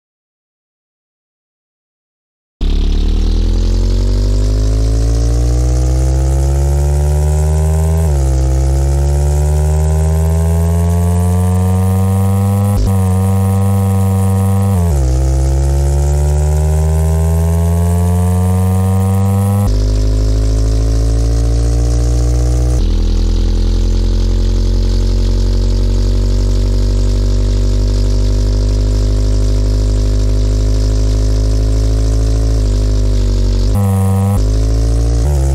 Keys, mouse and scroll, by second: 0.7-1.7 middle drag.